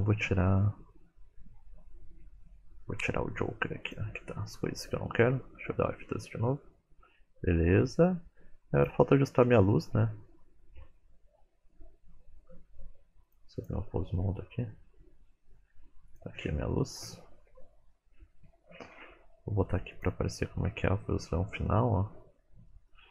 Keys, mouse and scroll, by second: 0.6-1.4 scroll down 1, 1.8-2.1 scroll down 1, 3.9 click, 3.9-4.5 scroll up 2, 13.2 click, 14.3-14.8 scroll down 1, 16.1 click, 16.1 scroll down 4, 17.1-18.5 scroll down 7, 19.0-20.1 scroll down 1, 20.1 click, 20.8 middle click, 22.1-22.7 scroll down 1, 22.7 middle click, 22.7 scroll down 3.